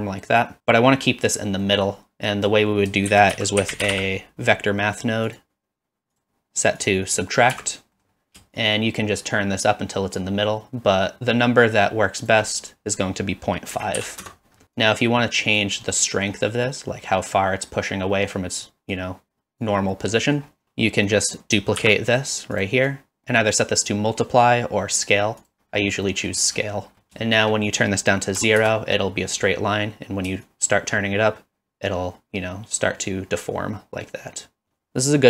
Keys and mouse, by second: 1.8 middle click, 2.3 click, 3.1 shift+a, 6.9-7.9 drag, 8.0 middle click, 8.7-12.3 shift+drag, 12.7-14.6 drag, 14.9 click, 15.9-16.3 middle drag, 18.4 click, 19.1 click, 20.3 middle click, 20.6 shift+a, 22.6 click, 22.9-25.5 drag, 26.2 middle click, 27.8-29.0 drag, 30.5-34.6 shift+drag.